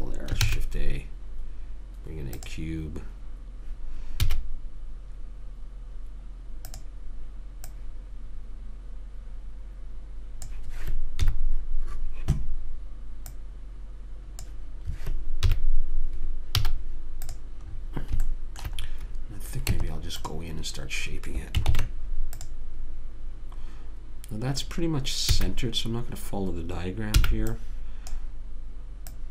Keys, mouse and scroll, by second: 0.8 shift+a, 4.6 s, 8.0 click, 9.8 middle click, 11.6 KP_1, 11.7-13.7 middle drag, 13.7 click, 15.8 KP_3, 16.9 z, 18.6 middle click, 20.1 Tab, 22.0 ctrl+Tab, 25.6 a, 27.5 b.